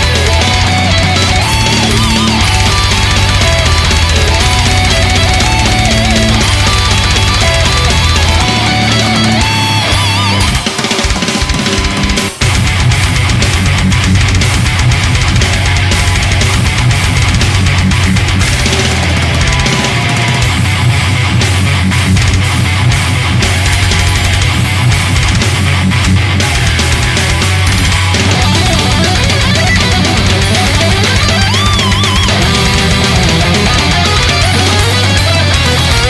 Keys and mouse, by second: 6.9 ctrl+z, 8.1 ctrl+z, 9.1 ctrl+z, 14.9 ctrl+z, 17.2 right click, 35.3 right click.